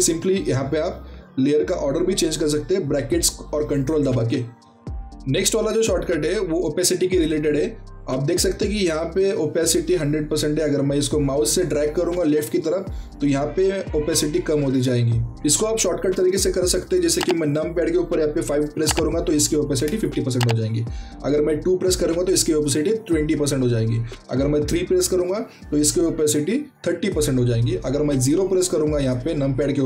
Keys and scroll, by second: 0.0-1.5 typing, 19.7 KP_5, 23.1 KP_2, 26.7 KP_3.